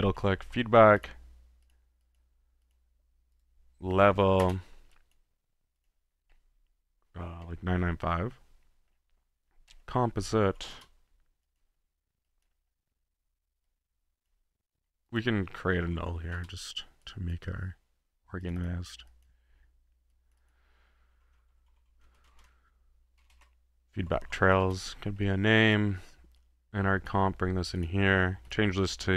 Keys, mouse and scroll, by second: 0.0-0.7 typing, 1.0-1.3 drag, 1.6-2.0 drag, 2.2 click, 2.8 drag, 3.8-4.9 typing, 5.2-5.7 drag, 5.9 click, 6.3-7.3 middle drag, 10.0-11.3 typing, 11.5 drag, 12.5 click, 12.9 middle click, 13.7-15.8 drag, 15.6-16.8 typing, 17.0-17.7 drag, 17.7-18.3 middle drag, 18.4 click, 18.8 click, 19.1-19.4 drag, 20.1 click, 25.2-25.6 middle drag, 25.6-26.1 drag, 26.3-28.2 drag, 28.5 click.